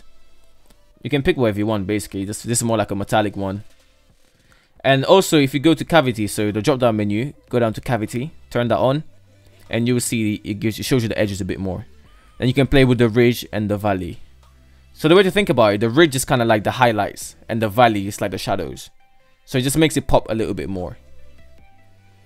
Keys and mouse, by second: 1.6-2.2 middle drag, 3.7-5.0 drag, 6.1-8.6 drag, 9.5-10.0 middle drag, 10.7-21.3 drag, 21.7 shift+middle drag.